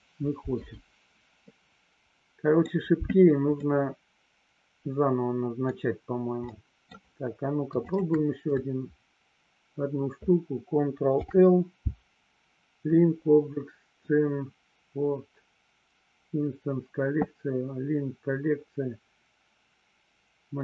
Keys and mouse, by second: 1.5-2.6 middle drag, 3.8-5.8 middle drag, 6.7 middle click, 8.0 shift+click, 11.1 ctrl+l.